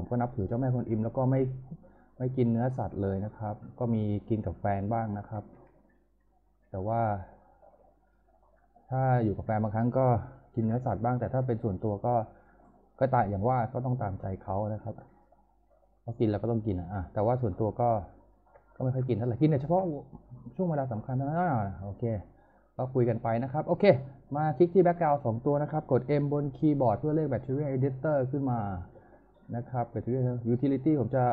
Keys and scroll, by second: 6.8 w, 10.6 p, 11.8 z, 26.1 m.